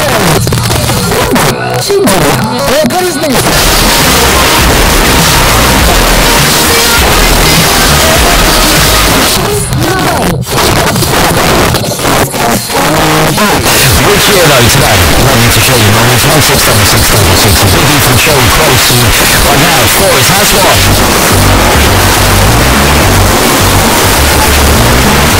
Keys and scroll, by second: 0.2 Return, 9.3 Page_Down.